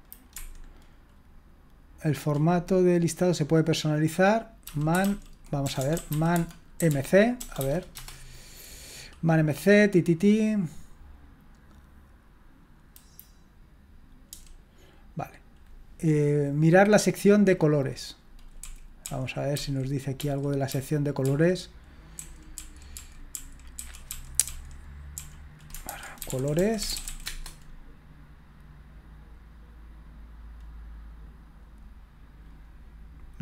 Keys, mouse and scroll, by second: 0.3 Escape, 4.4-7.9 typing, 14.3 j, 18.6-20.7 typing, 22.1-24.1 typing, 25.1-27.8 typing.